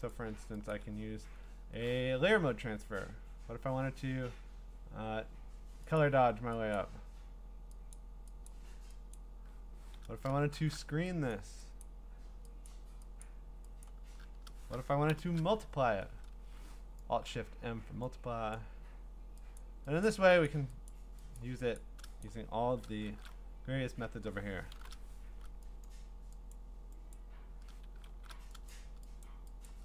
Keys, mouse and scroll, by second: 0.1 click, 0.7 click, 6.0 click, 6.8 click, 7.9 click, 8.5 click, 9.1 click, 10.5 alt+shift+s, 11.3 click, 11.8 click, 12.7 click, 13.2 click, 13.8 click, 15.1 alt+shift+m, 17.3 click, 18.5 click, 20.0 click, 20.5 click, 20.9 click, 21.4 click, 21.8 click, 22.2 click, 23.1 alt+shift+s, 24.8 alt+shift+o, 25.9 click, 26.5 click, 27.1 click, 28.1 alt+shift+f, 28.7 click, 29.2 click, 29.7 click.